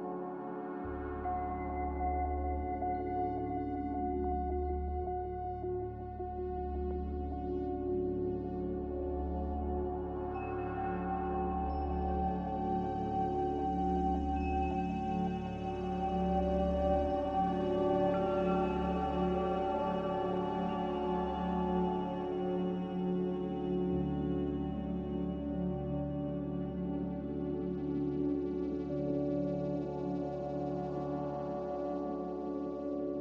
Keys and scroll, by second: 3.9 z, 24.3 Caps_Lock, 25.7 Delete, 28.4 ctrl+c, 28.8 ctrl+v.